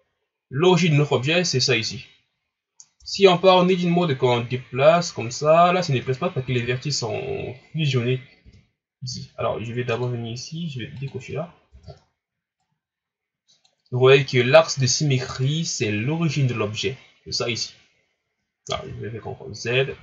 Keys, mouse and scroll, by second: 0.2-2.0 scroll up 1, 2.8 scroll down 3, 3.0 Tab, 4.0-6.5 drag, 6.5 ctrl+z, 8.4 Tab, 10.0-11.1 drag, 11.5 scroll up 1, 11.7 Tab, 12.6-15.6 drag, 18.7 ctrl+z, 19.9 ctrl+z.